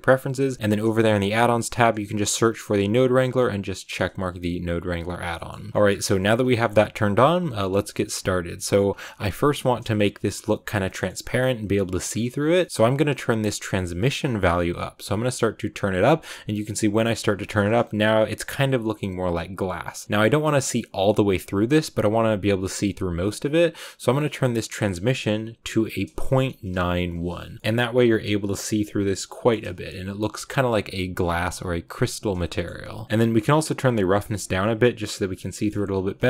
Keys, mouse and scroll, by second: 14.7 click, 15.1-17.3 drag, 17.3 shift+middle click, 17.5 scroll up 2, 20.0-27.0 shift+middle drag, 27.6-33.6 shift+middle drag, 33.6-35.3 drag, 35.3 shift+middle click, 35.8 scroll down 1, 36.1 shift+middle click.